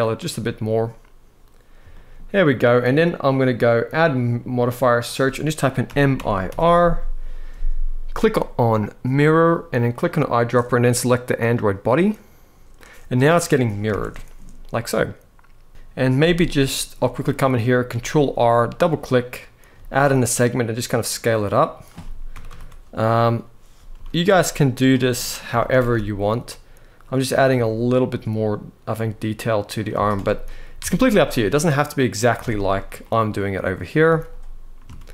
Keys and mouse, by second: 1.6 shift+middle drag, 3.7-8.8 drag, 13.6 alt+a, 15.7 Tab, 15.9 z, 16.4 shift+middle click, 17.6 ctrl+r, 18.5 click, 19.5 s, 21.0 click, 22.0 ctrl+KP_Add, 22.2 ctrl+KP_Add, 23.4 s, 23.8 shift+z, 24.8 click, 25.2 s, 25.4 shift+x, 29.4 shift+click, 29.9 z, 30.5 Tab, 30.8 middle click, 32.1 Tab, 32.7 middle click, 33.8 z, 34.7 ctrl+z.